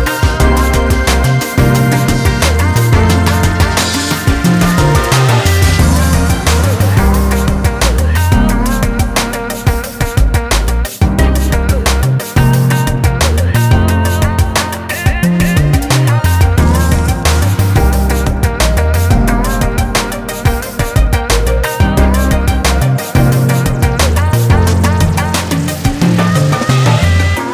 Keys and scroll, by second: 2.2 ctrl+j, 23.4 ctrl+space.